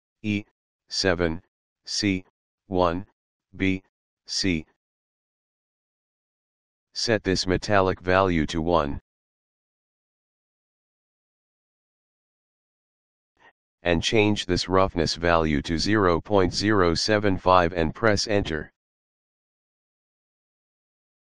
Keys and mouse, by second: 0.2 e, 0.6 7, 1.7 c, 2.0 1, 2.3 b, 2.9 c, 4.2 Return, 8.8 click, 15.1 click, 19.7 KP_Decimal, 20.2 KP_0, 20.7 KP_7, 20.9 KP_5.